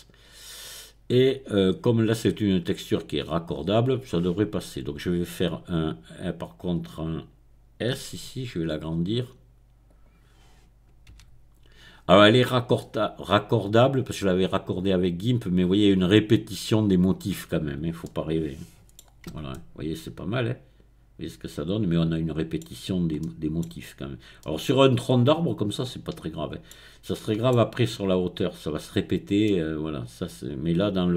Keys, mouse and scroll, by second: 0.1-1.2 scroll down 1, 1.2-3.8 middle drag, 8.0 s, 9.8 click, 11.0 g, 12.4 click, 14.0-15.3 middle drag, 15.3-16.4 scroll up 1, 18.0-22.8 middle drag, 19.3 Tab, 22.8-23.6 scroll up 1, 24.4-26.7 middle drag, 26.7-27.1 scroll down 1, 27.1-28.3 middle drag, 28.3-29.1 scroll up 1, 29.5-31.1 middle drag.